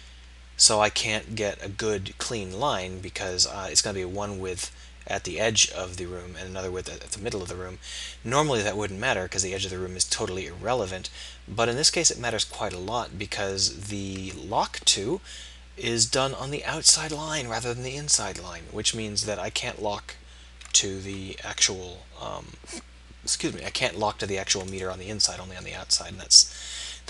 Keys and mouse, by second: 25.9 ctrl+z.